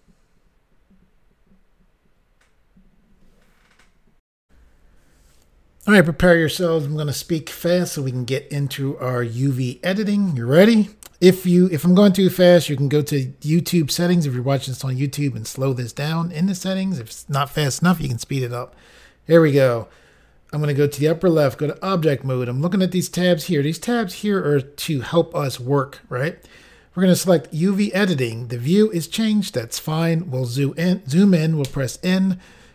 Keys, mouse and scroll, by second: 4.4 Insert, 21.0 click, 21.1 click, 21.6 click, 21.7 click, 27.7 click, 27.8 click, 29.2 scroll up 3.